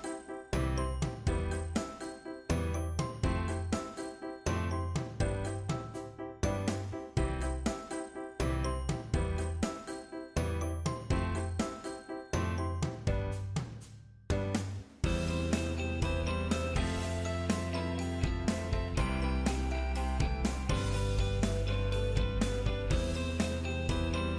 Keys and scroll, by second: 15.9 ctrl+8, 17.3 ctrl+Down, 24.1 ctrl+Down.